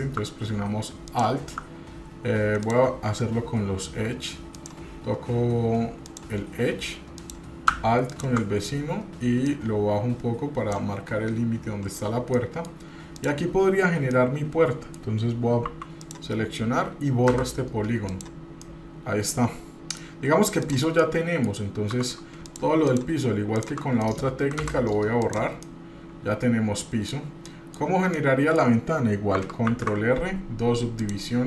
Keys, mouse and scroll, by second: 1.1 alt+click, 2.6 click, 4.6 click, 6.0 click, 7.1 click, 8.1 alt+click, 9.5-10.8 drag, 12.3 middle click, 13.1 click, 14.1-15.1 middle drag, 15.6 3, 16.0 click, 17.3 Delete, 18.6-20.0 middle drag, 20.6 click, 21.0 middle click, 22.4 shift+click, 22.8 shift+click, 23.5 shift+click, 24.0 middle click, 24.6 Delete, 25.6-27.1 middle drag, 27.5 middle click, 28.1 shift+middle click, 28.7-29.4 scroll down 1, 29.7 ctrl+r.